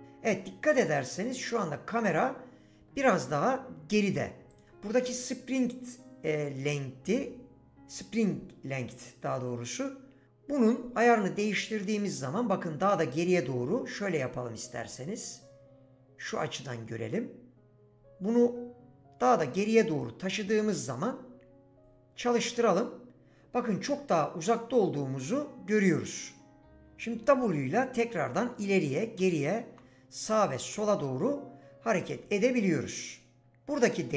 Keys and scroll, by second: 26.7 s, 27.2 w, 28.4-30.4 typing.